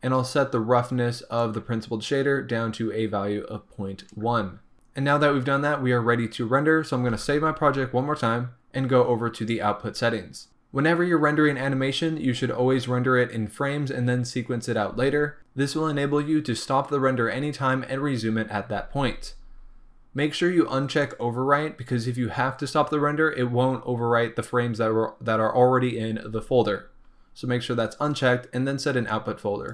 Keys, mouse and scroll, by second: 1.6-21.2 drag, 4.7-9.0 scroll up 2, 9.0-14.0 scroll up 1, 14.0-21.1 scroll up 1.